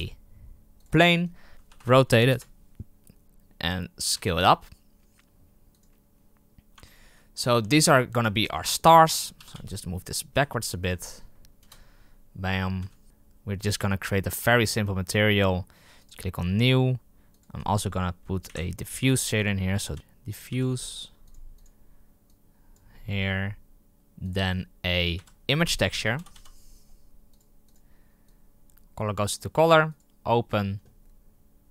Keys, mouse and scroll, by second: 0.8 shift+a, 1.5 z, 1.7 r, 4.1 s, 6.7 Tab, 7.6 z, 7.9 scroll down 4, 8.1 Tab, 8.3-9.4 middle drag, 9.4 g, 11.5 KP_0, 12.4-12.7 scroll up 4, 12.7 s, 14.5 click, 16.0-17.3 drag, 18.5 Delete, 19.0 shift+a, 22.7-31.7 drag.